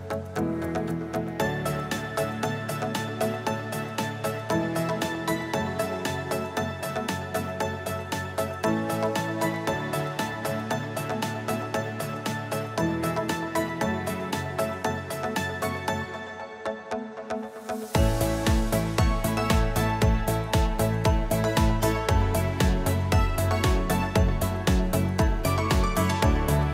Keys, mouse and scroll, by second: 2.5 click, 4.0-7.4 click, 4.6 =, 4.7 =, 6.6 click, 7.9 click, 8.1 Delete, 10.0 click, 11.4 click, 12.5 click, 14.4 F1, 14.8 click, 15.5 -, 15.6 -, 16.2 -, 16.4 -, 16.8 click, 17.5 ctrl+d, 18.6 click, 19.1 h, 22.7 click, 23.6 click, 25.5 click.